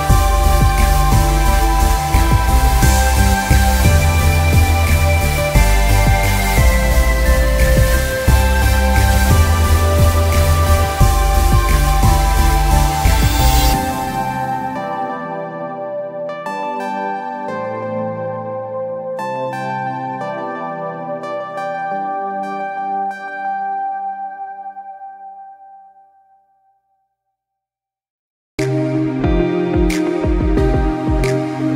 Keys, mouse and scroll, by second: 0.2 click, 1.0 scroll up 1, 1.2-1.6 scroll down 3, 1.7 click, 2.8 click, 5.1 scroll down 1, 5.4 click, 5.6 scroll up 1, 6.0 click, 6.3 alt+scroll up 1, 6.4 click, 6.6 alt+scroll down 2, 6.8 click, 7.5 click, 7.6 alt+scroll, 7.9-8.4 alt+scroll up 3, 8.4 click, 9.1 click, 9.7 click, 10.3 click, 11.2 click, 12.8 click, 13.3 click, 13.9 click, 14.4 scroll up 1, 14.6 space, 14.8 click, 14.9 alt+scroll down 1, 15.0-15.3 alt+scroll up 2, 15.6 click, 16.3 shift+click, 16.6 ctrl+g, 16.7 click, 16.8-17.2 alt+scroll down 3, 17.2 alt+scroll up 1, 17.3 scroll down 1, 17.6 space, 17.7 alt+scroll up 2, 18.0 shift+click, 19.0-19.6 alt+scroll up 3, 19.2 click, 19.6 click, 20.9 space, 21.1 click, 21.7-22.1 alt+scroll down 2, 22.9 space, 23.4 alt+scroll down 1, 23.8 click, 24.8 click, 25.6-25.9 scroll up 1, 25.9 click, 26.5 alt+scroll up 1, 26.7 click, 27.2-28.1 alt+scroll down 2, 27.3 space, 27.5 click, 28.1 click, 28.3 scroll up 1, 28.4 click, 29.4 click, 31.3 click.